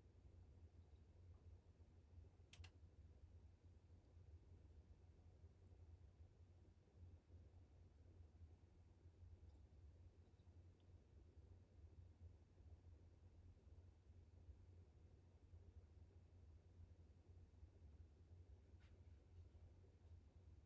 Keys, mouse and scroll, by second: 4.9 click, 8.2-14.5 drag.